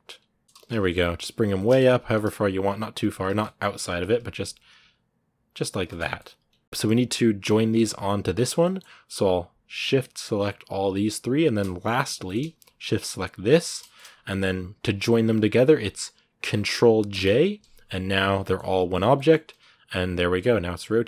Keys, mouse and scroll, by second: 0.4 z, 1.3 shift+middle click, 1.7 g, 3.1 scroll down 1, 3.2 middle click, 3.6 g, 5.8 Tab, 5.8 scroll down 2, 6.0 middle click, 6.6 a, 6.9 right click, 7.5 middle click, 8.2 right click, 8.4 middle click, 8.6-9.6 scroll up 1, 11.2 shift+right click, 12.0-13.3 middle drag, 13.3 shift+right click, 13.6-16.9 shift+middle drag, 16.9 ctrl+j, 18.2 middle click, 18.4 g, 18.9 middle click, 19.1 r, 20.5 scroll down 3.